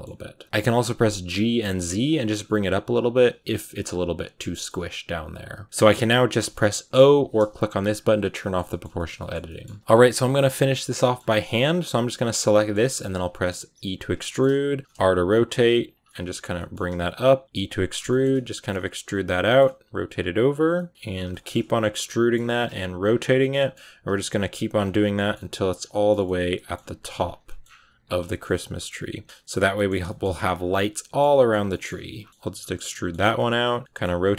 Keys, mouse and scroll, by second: 0.3 g, 0.4-1.1 scroll up 2, 1.1 g, 4.4 middle click, 5.1 right click, 5.3 g, 5.6-6.8 middle drag, 6.8 o, 7.5 click, 7.7 click, 8.0 scroll up 1, 8.0 middle click, 8.3 middle click, 8.5 scroll up 1, 8.5-9.5 middle drag, 9.5 a, 9.8 shift+middle click, 10.4 right click, 10.6-11.8 shift+middle drag, 11.8 g, 12.4 shift+middle click, 12.9 scroll up 1, 13.2 e, 14.1 middle click, 14.3 scroll down 1, 14.3 middle click, 14.8 r, 15.5 g, 15.9 middle click, 16.7 r, 17.0 g, 17.4 e, 17.9 shift+middle click, 18.7-25.4 typing, 19.1 middle click, 20.6 middle click, 21.2 shift+middle click, 21.9 middle click, 23.4 middle click, 25.0 middle click, 25.8 middle click, 26.7 g, 27.3 middle click, 27.5 scroll down 5, 27.7 e, 28.1 shift+middle click, 28.3 scroll up 1, 28.5 middle click, 28.8 r, 29.2 g, 29.6-29.9 scroll up 2, 29.6 shift+middle click, 29.9 middle click, 30.1 g, 30.5 scroll down 1, 30.6-31.8 middle drag, 31.8-34.1 typing, 32.7 middle click, 33.8 middle click.